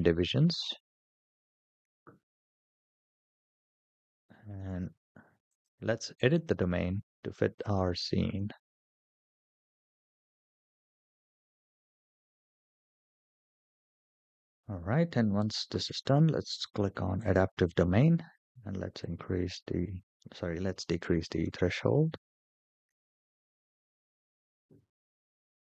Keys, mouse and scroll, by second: 2.1 scroll down 1, 2.1 KP_0, 3.4 shift+middle click, 4.1 shift+middle drag, 5.3-6.3 drag, 7.4 click, 8.5 scroll down 3, 8.8-13.4 typing, 9.3 scroll down 2, 9.3 shift+middle click, 9.4 middle click, 9.6 click, 9.8 scroll up 4, 10.3 click, 10.6 click, 11.2 scroll up 4, 11.3 middle click, 11.4 scroll down 2, 11.5 ctrl+z, 11.6 ctrl+z, 11.7 click, 11.9 click, 12.1 shift+middle click, 12.5 click, 13.0 middle click, 13.3 scroll down 2, 13.3 click, 13.7 middle click, 13.8 click, 16.4 click, 17.0 click, 18.8-22.7 drag, 21.4 KP_0, 21.5 KP_0, 25.5-25.6 scroll down 3.